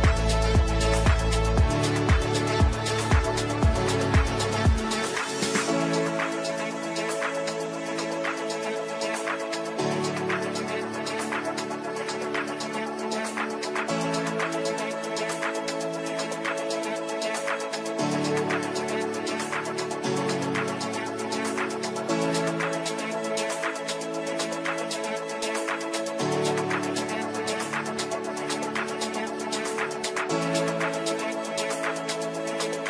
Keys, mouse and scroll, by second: 13.7 click, 16.7 ctrl+z, 17.3 click, 18.5-22.6 drag, 25.0 right click, 25.9-32.8 drag.